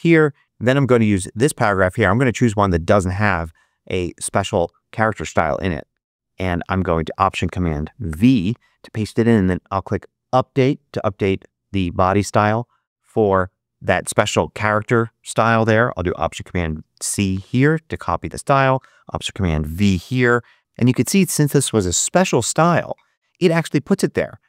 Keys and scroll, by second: 0.4 super+z, 8.0 alt+super+v, 16.5 alt+super+c, 19.7 alt+super+v.